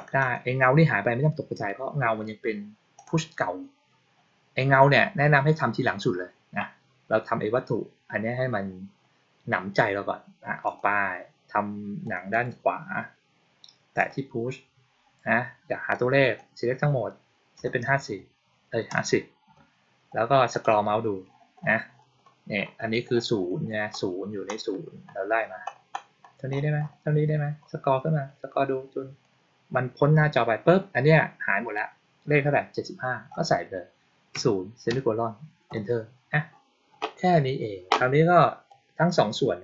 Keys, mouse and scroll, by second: 0.1 click, 2.9 click, 10.6 click, 12.0 click, 12.2 click, 13.9 click, 15.8-16.3 drag, 20.4 click, 20.8-24.4 middle drag, 24.7-25.8 middle drag, 38.6-39.6 drag.